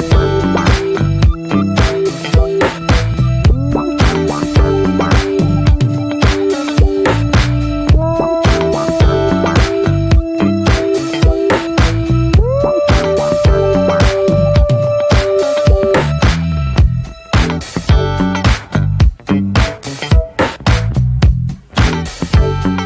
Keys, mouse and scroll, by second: 1.2 drag, 1.5-3.2 middle drag, 3.2-4.9 drag, 4.9 ctrl+z, 5.0 click, 5.8 Tab, 6.1 click, 6.5 l, 7.2 alt+middle click, 7.4 alt+z, 7.8 scroll up 1, 8.4 shift+d, 9.1 click, 10.2 shift+middle click, 10.3 shift+scroll up 2, 10.8 s, 12.5 middle click, 12.6 scroll up 1, 13.0-13.6 shift+middle drag, 13.6 alt+z, 13.7-14.2 shift+middle drag, 14.2-14.8 scroll up 1, 14.8-16.4 drag, 17.0 click, 17.4-18.0 middle drag, 18.0 ctrl+s, 18.1 drag, 18.2 scroll down 2, 18.4-19.1 shift+middle drag, 19.1 ctrl+a, 19.5 middle click, 19.8 click, 20.7-21.1 drag, 21.2 scroll down 2, 21.3-21.7 middle drag, 21.7 click, 22.0-22.4 shift+middle drag, 22.4 scroll up 1, 22.5 click, 22.7 ctrl+a.